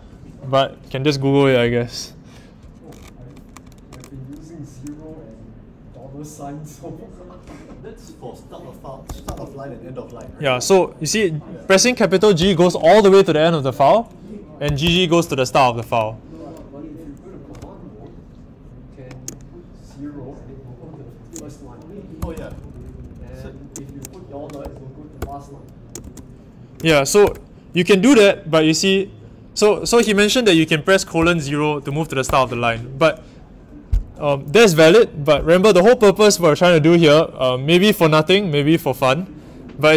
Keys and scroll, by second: 9.0 typing, 12.4 shift+g, 14.6 typing, 22.2-25.1 typing, 25.2 Return, 26.8 shift+4, 27.2 Return, 31.1 0, 32.2 Return.